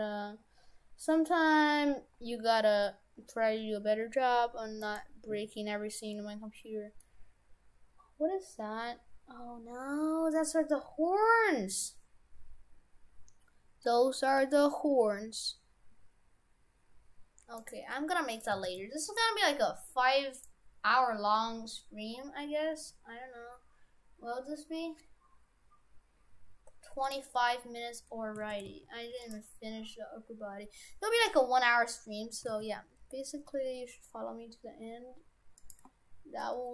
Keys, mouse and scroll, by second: 2.9-4.8 scroll down 6, 4.8 right click, 6.2 middle click, 13.0-13.9 scroll up 3, 13.9 middle click, 14.7-15.4 scroll up 1, 17.6 right click, 18.4 right click, 18.6 shift+f, 28.0 middle click, 28.4 shift+f, 32.4 s.